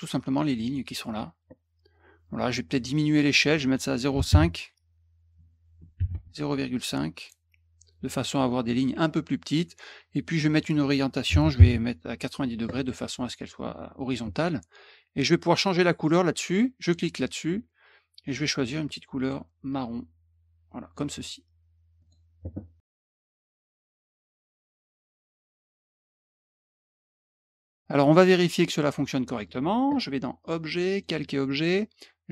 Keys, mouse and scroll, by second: 0.6 click, 3.3 click, 6.1 ,, 7.2 click, 10.4 click, 16.8 click, 18.8 click, 19.7 click, 22.0 click, 24.3 middle click, 24.3-24.7 scroll down 2, 24.6 middle click, 25.9 middle click, 28.8 middle click, 30.4 click, 30.9 click.